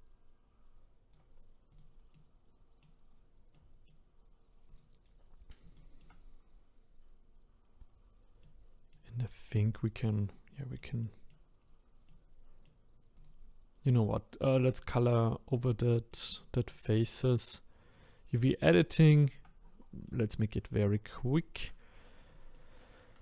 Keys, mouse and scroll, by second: 1.8 click, 2.1 middle click, 3.1-3.5 scroll down 3, 3.5-4.8 middle drag, 4.8 click, 5.0-5.5 scroll up 1, 5.7 shift+middle click, 6.4-7.2 scroll up 1, 7.2-8.4 scroll down 3, 8.4 middle click, 9.2-9.5 scroll down 1, 9.5-11.6 middle drag, 11.6-12.2 scroll up 1, 12.2-13.2 middle drag, 13.2 click, 14.0-14.8 scroll up 1, 14.8-16.1 drag, 16.1-18.0 middle drag, 18.0 click, 18.4-18.9 scroll up 1, 18.9 shift+middle click, 19.3-20.1 shift+scroll up 1, 20.1 middle click, 20.4 scroll down 1, 20.9 scroll down 1, 21.3 shift+middle click, 21.7-22.3 scroll up 6, 22.3 middle click, 22.8-23.2 scroll down 1.